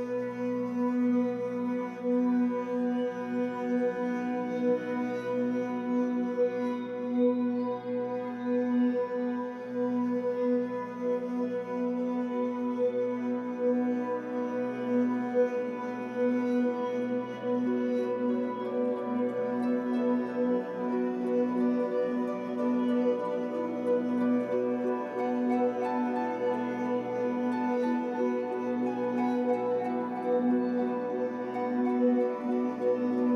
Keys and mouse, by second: 0.0-1.8 typing, 5.0 click, 6.0 click, 7.1 click, 8.2 click, 9.7 click, 10.9 click, 11.9 click, 13.8 click, 15.1 click, 15.2 click, 16.4 click, 16.8 click, 18.0 click, 18.2 click, 19.0 click, 19.2 click, 20.2 click, 20.5 click, 21.4 Delete, 21.4 click, 21.6 Delete, 21.6-26.1 typing, 26.7 click, 28.0 click, 29.0 click, 30.9-31.9 drag.